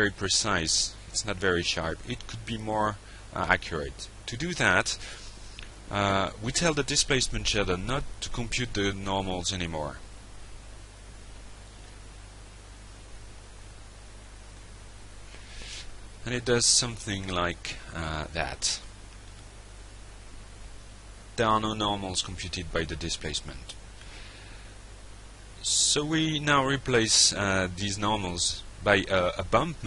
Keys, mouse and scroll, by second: 2.8 click, 4.8 click, 10.7 click, 12.4 click, 15.4 click, 22.9 click, 26.2-29.7 drag.